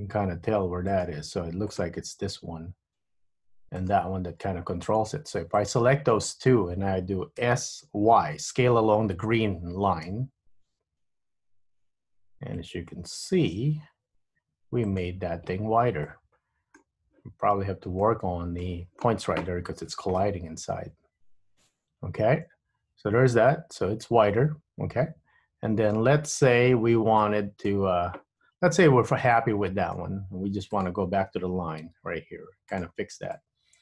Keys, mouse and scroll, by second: 1.8 click, 2.1 g, 4.5-5.6 scroll up 4, 5.6 click, 7.5 s, 16.2 middle click, 18.2 middle click, 20.2 middle click, 26.7-27.3 scroll down 3, 27.3 middle click, 29.0 Tab, 29.5 middle click, 30.8 click, 31.9 Tab, 32.9 click, 33.5 middle click.